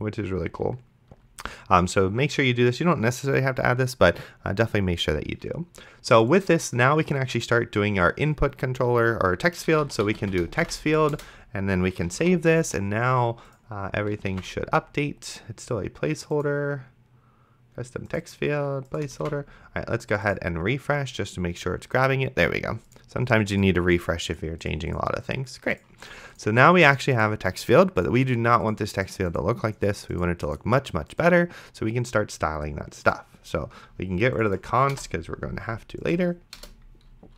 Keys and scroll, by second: 9.6-10.9 typing, 11.1 Return, 12.5 ctrl+s, 14.6 ctrl+s, 19.5 ctrl+s, 35.2 BackSpace, 36.6 Return.